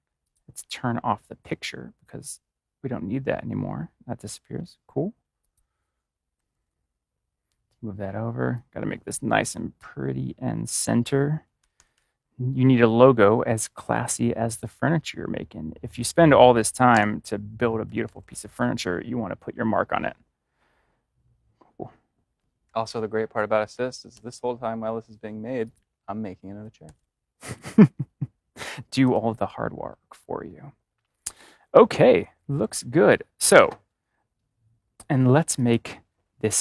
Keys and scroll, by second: 6.3-6.7 typing, 11.5 ctrl+=, 16.8 ctrl+=, 16.9 BackSpace, 17.8 ctrl+-, 24.0 ctrl+y, 26.7 ctrl+shift+[.